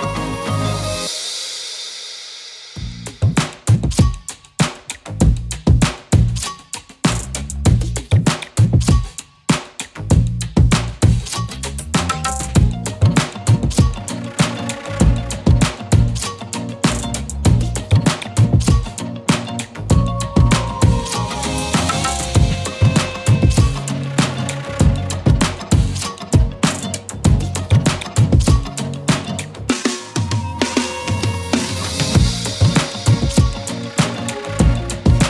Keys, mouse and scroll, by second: 0.1 ctrl+c, 0.4 ctrl+f, 2.8-6.6 alt+shift+drag, 7.4 ctrl+c, 7.7 ctrl+f, 9.0-10.6 alt+shift+drag, 10.9-13.1 typing, 11.5 click, 11.9 click, 12.4 click, 12.9 click, 13.2 click, 14.8 scroll up 1, 16.4 click, 17.4 ctrl+c, 17.7 ctrl+f, 19.0-20.3 alt+shift+click, 21.3 right click, 22.1 click, 25.4 shift+t, 26.1 shift+r, 26.6 shift+u, 27.2 shift+e, 28.5-30.8 typing, 31.2 ctrl+a, 32.8 shift+click.